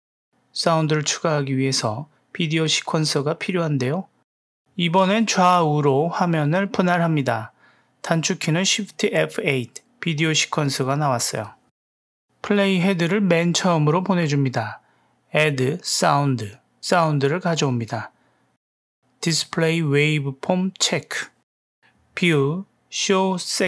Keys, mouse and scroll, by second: 2.3-5.9 drag, 6.4 click, 8.5 shift+F8, 11.7-13.4 drag, 16.5 click, 19.3 n, 20.1 click, 21.0 n, 22.1-23.6 drag.